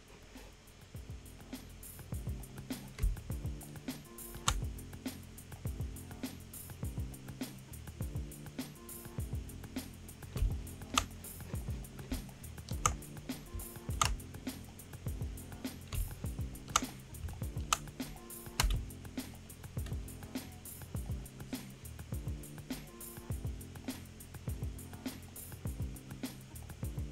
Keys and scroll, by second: 3.0 space, 10.4 space, 15.9 space, 18.0 space, 18.5 space, 19.4 space.